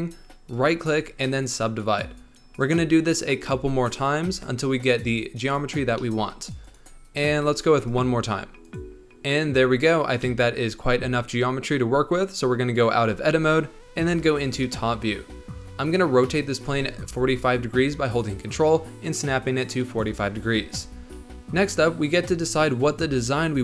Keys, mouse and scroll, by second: 0.5-6.0 right drag, 6.0-6.4 middle drag, 6.4 right click, 7.2 middle click, 7.8-8.8 right drag, 8.8-13.0 middle drag, 13.0 Tab, 14.6 KP_7, 16.6 r.